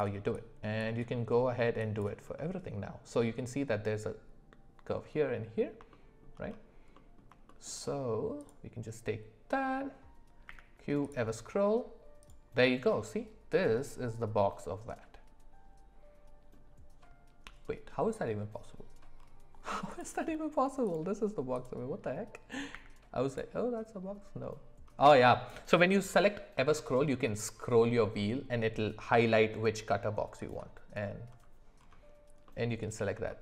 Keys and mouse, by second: 5.2 middle click, 5.9-6.2 shift+middle drag, 6.9 middle click, 7.4 shift+middle drag, 8.4 click, 10.4 q, 13.7-16.5 middle drag, 17.6 middle click, 19.9 click, 20.8 click, 21.5 click, 22.7 q, 32.4-33.0 middle drag, 33.3 shift+middle click.